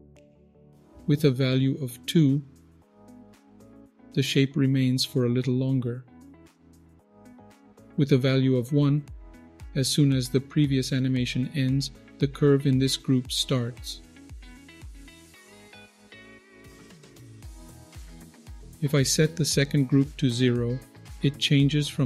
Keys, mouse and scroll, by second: 0.8 click, 3.2-7.0 shift+drag, 7.9 click, 9.7-15.4 shift+drag, 15.6 click, 16.3-18.5 shift+drag.